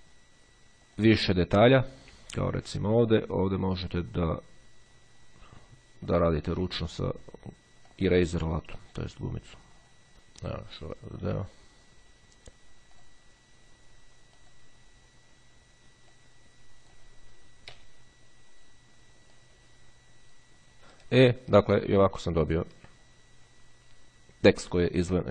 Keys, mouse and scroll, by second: 0.2 click, 2.5-3.5 ctrl+scroll up 2, 3.5-4.0 ctrl+scroll down 1, 4.0 scroll down 1, 4.5-5.6 drag, 6.7-7.5 drag, 8.1-10.1 drag, 10.1-10.7 ctrl+scroll up 1, 10.7-11.1 ctrl+scroll up 1, 11.1-11.6 ctrl+scroll down 1, 13.1 click, 14.6 click, 17.9 Delete, 19.4 click, 21.1-21.9 ctrl+scroll down 1, 21.9 ctrl+click, 22.3 ctrl+middle click.